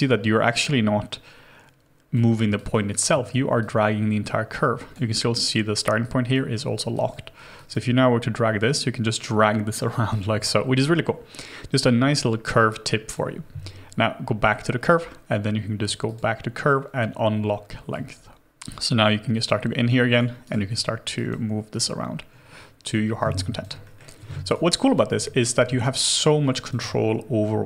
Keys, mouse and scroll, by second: 2.9 alt+right click, 7.9 double click, 20.4 right click, 23.3 alt+click, 23.8 alt+middle click, 24.4 right click, 25.8 alt+right click, 26.2 alt+click.